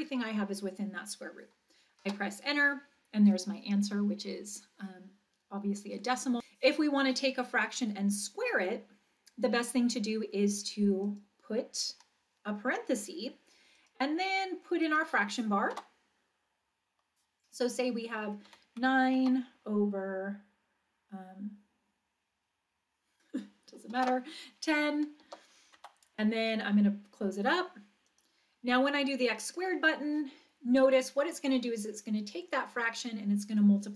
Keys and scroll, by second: 2.0 Return, 11.1 (, 15.7 Return, 18.4 9, 19.2 Down, 24.0 1, 25.3 0, 25.8 Right, 28.1 ).